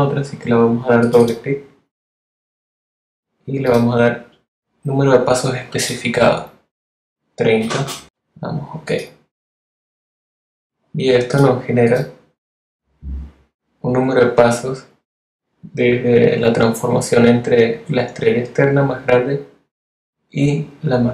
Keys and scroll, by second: 6.6-7.5 typing.